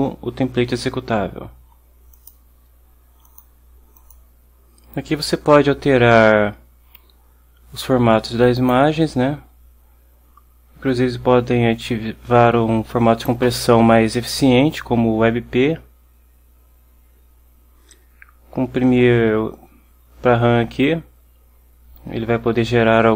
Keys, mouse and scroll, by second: 2.2 click, 4.1 click, 8.7 click.